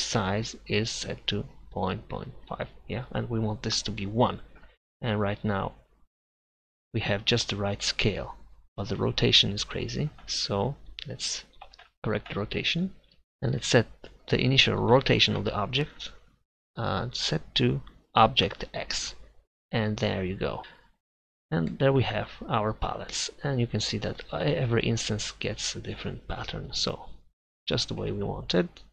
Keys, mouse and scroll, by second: 2.6-4.3 middle drag, 5.5-6.9 middle drag, 7.2 middle click, 11.4-15.8 drag, 16.6-18.6 drag, 27.9 Tab.